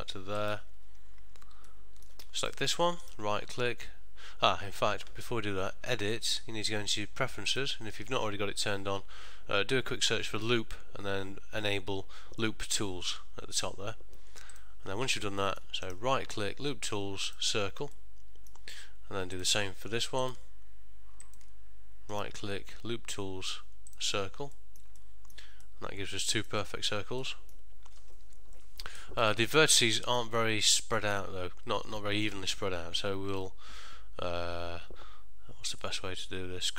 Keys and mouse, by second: 1.8 ctrl+middle click, 2.5 alt+click, 3.1 right click, 6.3 click, 15.5 middle click, 16.0 right click, 18.0 middle click, 19.4 alt+click, 20.4 alt+click, 22.2 right click, 24.7 middle click, 25.1 ctrl+middle click, 25.7 middle click, 27.3 middle click, 29.1 middle click, 29.7 ctrl+middle click, 30.1 shift+middle click, 30.5 middle click, 35.9 middle click.